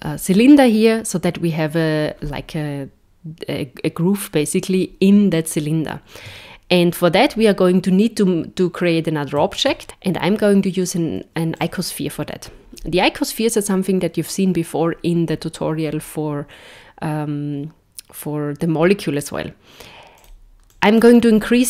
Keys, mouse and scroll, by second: 9.3 shift+a, 20.3 click.